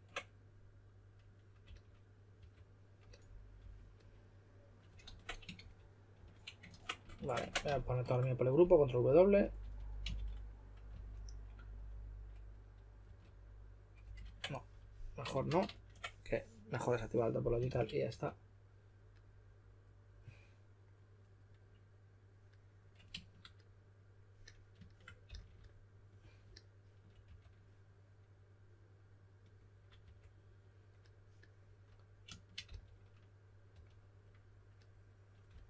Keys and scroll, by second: 1.6-3.5 typing, 5.0 super+z, 5.5-6.1 typing, 7.1 super+w, 7.7 shift+f, 9.6 2, 10.1 shift+f, 10.9 2, 13.0 typing, 14.2 super+z, 15.3 shift+f, 15.6 super+z, 17.6 shift+f, 18.0 2, 25.2 s, 27.2 2, 30.0 typing, 32.6-34.2 typing, 35.4 typing.